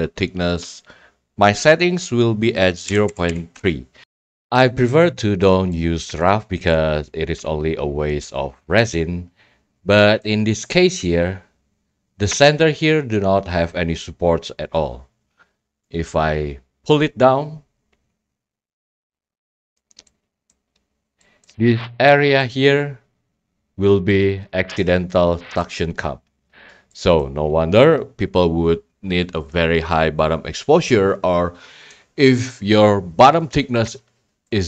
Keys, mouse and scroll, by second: 0.6-1.7 drag, 4.0-4.3 scroll, 4.1 click, 5.5 scroll, 6.5 right click, 6.7-7.1 right drag, 10.2-11.3 right drag, 16.4 drag, 19.7 click, 20.5 right click, 20.8 scroll, 21.1 scroll down 5, 21.4 right click, 25.6 right click, 26.0 scroll, 26.7 scroll, 27.2 right click, 27.5 scroll, 33.6-34.6 middle drag, 33.6-34.5 scroll.